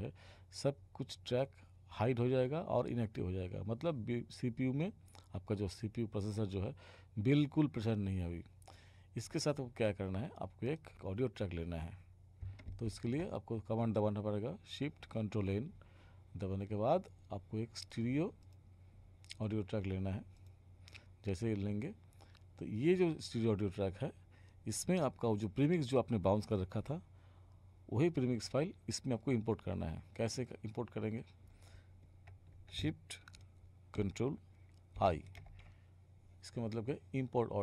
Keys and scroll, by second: 12.8 ctrl+shift+n, 35.0 ctrl+shift+i.